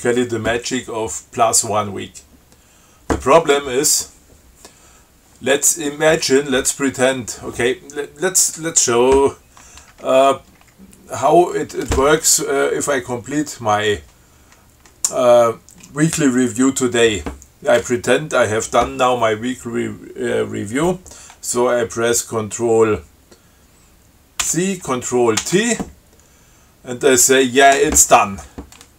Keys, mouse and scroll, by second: 0.1 click, 0.4 q, 24.7 ctrl+c, 25.6 ctrl+t.